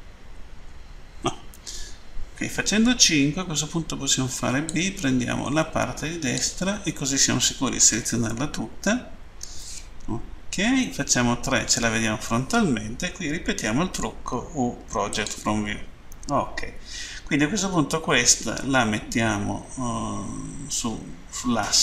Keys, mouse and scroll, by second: 4.4 click, 10.7 Page_Down, 15.0 click.